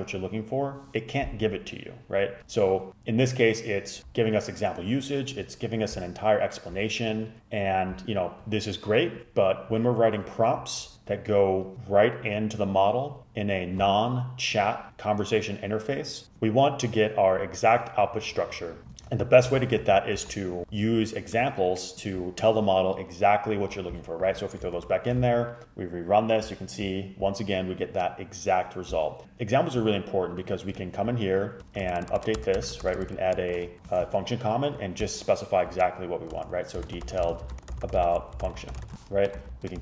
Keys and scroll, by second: 19.2 super+z, 19.6 super+z, 19.9 super+z, 24.8 super+Return, 31.6 Return, 31.6 Tab, 32.1 shift+', 32.2 shift+', 32.5 Return, 32.6 Return, 33.1 shift+', 33.4 shift+', 35.8-39.7 typing.